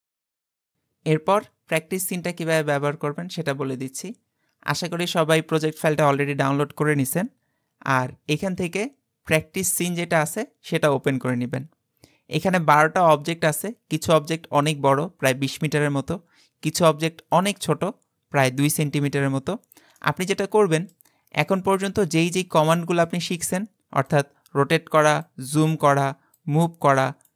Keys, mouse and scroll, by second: 8.4 click, 12.5-14.1 middle drag, 14.1 click, 14.7 click, 15.7-16.2 scroll down 2, 17.3 click, 20.0-21.2 middle drag, 21.2-21.7 scroll up 2, 21.7-24.1 middle drag, 24.1 click, 25.3-27.3 drag.